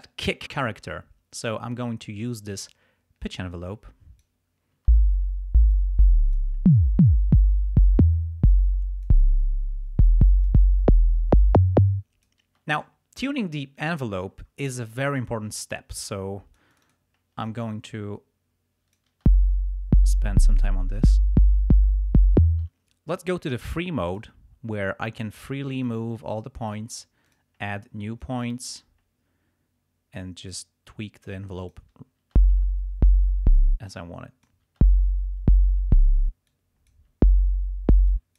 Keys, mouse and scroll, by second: 1.4 click, 3.3-4.4 drag, 4.7 space, 5.8 click, 6.7-9.3 drag, 10.4-12.5 drag, 12.5 space, 15.0-17.1 drag, 17.4-19.1 drag, 19.1 space, 22.5 space, 24.1 click, 25.8-26.9 drag, 27.2 click, 28.2-30.7 drag, 31.3 click, 32.3 space, 33.6 space, 33.9 click, 34.6 space, 36.1 space, 36.5 click, 37.1 space, 38.0 space, 38.1 click.